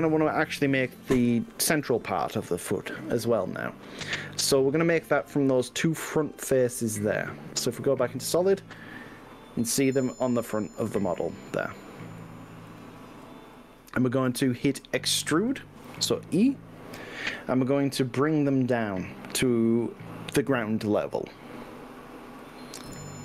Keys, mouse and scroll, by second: 4.4 middle click, 6.2 z, 7.6 middle click, 8.8-10.2 middle drag, 11.2 click, 12.8 shift+click, 13.6-15.7 middle drag, 16.0 e, 22.6 click, 22.9 KP_1.